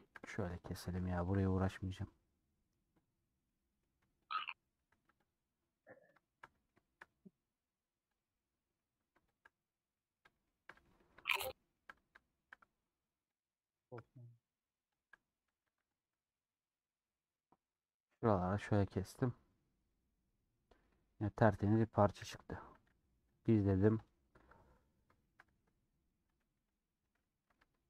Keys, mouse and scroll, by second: 0.1 shift+click, 0.6 scroll down 3, 0.8-2.0 shift+middle drag, 2.0 scroll up 1, 2.0 scroll down 1, 2.1-3.1 scroll up 1, 3.1 click, 3.2-4.4 middle drag, 4.4 shift+click, 4.8 a, 5.8-7.3 middle drag, 7.3-7.8 scroll up 5, 8.3 click, 8.3-9.4 middle drag, 9.4 shift+click, 9.8 scroll down 2, 9.9-12.6 middle drag, 12.6-13.0 scroll up 4, 13.5 click, 13.7-15.1 middle drag, 15.1 shift+click, 15.6 a, 16.1 u, 17.1 middle click, 17.6 Tab, 17.7 middle click, 18.3 scroll down 2, 18.6 scroll up 1, 18.7-19.4 scroll down 9, 19.9-22.2 middle drag, 22.2 /, 24.0 click, 25.2 shift+middle click, 26.0 click, 26.7 click, 27.0 /, 27.2 middle click, 27.7 Tab, 27.7-27.8 middle drag.